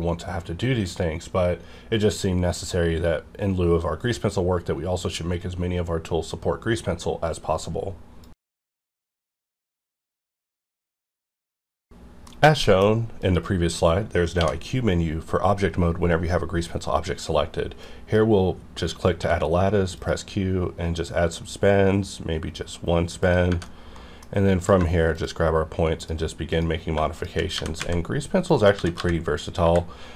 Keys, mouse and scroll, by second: 14.4 q, 17.8-19.2 drag, 19.2 q, 19.9 click, 23.2 click, 23.6 middle click, 24.6 click, 25.1 shift+click, 27.5-29.6 typing, 28.5 click.